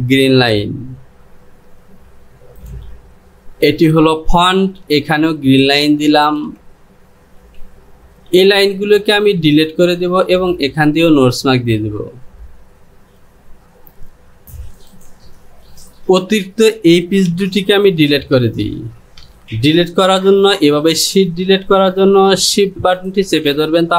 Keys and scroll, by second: 3.9 Home, 14.4 j.